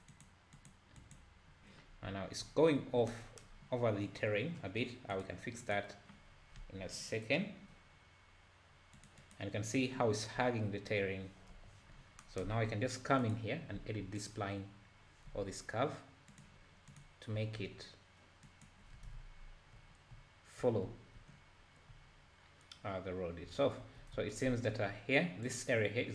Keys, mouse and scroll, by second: 2.0 `, 5.1-6.3 drag, 6.3-6.8 scroll down 3, 8.9-10.4 drag, 11.5 KP_7, 11.9-12.3 scroll up 4, 13.2 click, 13.8 Tab, 14.2 click, 15.3 g, 16.9 click, 17.4 g, 23.8 `, 24.2 Tab, 24.5 `, 25.5 click.